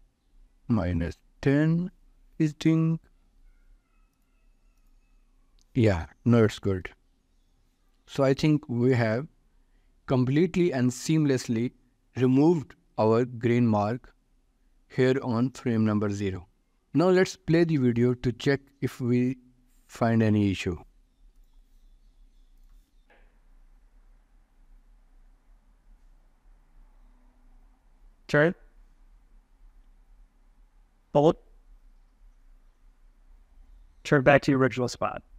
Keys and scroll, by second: 7.3 ctrl+s.